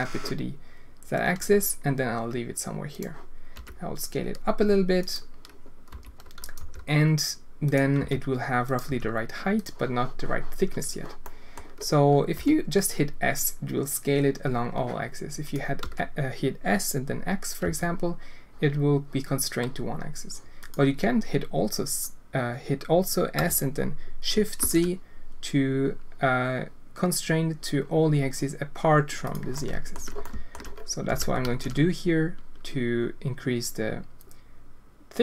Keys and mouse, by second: 3.5 s, 5.9 s, 6.6 g, 8.0 s, 8.8 g, 11.3 click, 12.3 s, 15.8 s, 23.3 s, 29.6 alt+shift+click, 30.3 alt+shift+click, 31.0 s.